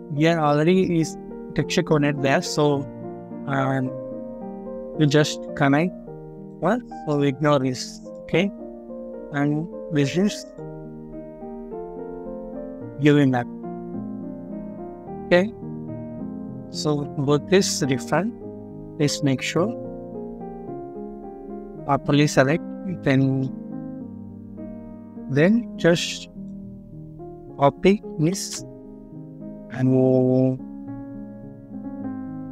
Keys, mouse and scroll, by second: 8.4 scroll down 1, 9.0 middle click, 9.7 scroll up 1, 15.7 scroll down 1, 16.2 middle click, 16.7 scroll up 1, 18.4 scroll down 1, 19.0 middle click, 20.1 scroll up 1, 23.1 middle click, 23.5 scroll down 1, 24.1 middle click, 24.5 scroll down 1, 28.2 ctrl+c.